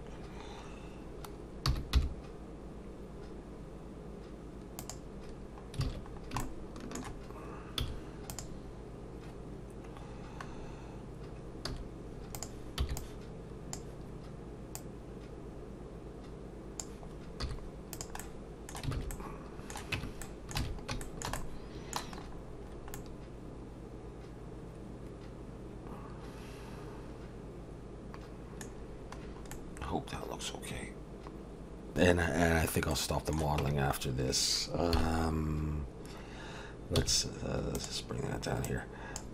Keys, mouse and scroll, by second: 1.7 g, 5.3-5.8 scroll down 3, 5.8 alt+a, 6.1 scroll down 2, 6.4 shift+middle click, 7.8 z, 10.5 scroll down 2, 11.7 z, 12.8 b, 14.7 click, 17.4 z, 18.2 middle click, 18.9 alt+a, 19.1 middle click, 19.9 Tab, 20.2 middle click, 20.6 alt+a, 21.0 shift+middle click, 21.4 middle click, 22.2-23.2 scroll up 4, 22.9 middle click, 28.8-29.4 scroll down 5, 29.5 middle click, 32.1 click, 32.9 middle click, 33.6 Tab, 35.0 KP_7, 37.0 s, 38.6 click.